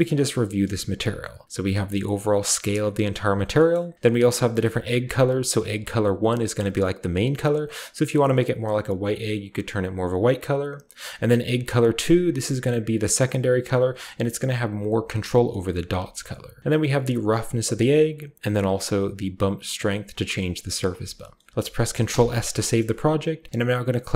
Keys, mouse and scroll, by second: 0.1-0.9 scroll up 2, 0.9-3.1 shift+scroll up 1, 3.1-3.4 shift+middle drag, 3.4-3.9 shift+scroll down 1, 3.9-5.0 shift+middle drag, 5.0-10.0 drag, 10.0-11.0 middle drag, 11.0 click, 11.1 middle click, 11.9-15.9 drag, 15.8 typing, 16.6-17.8 drag, 18.1-20.6 drag, 21.0-22.0 scroll down 1, 21.8-22.5 typing, 22.5 ctrl+shift+middle drag, 22.5-23.3 ctrl+shift+scroll down 1, 22.8-24.1 ctrl+shift+middle drag.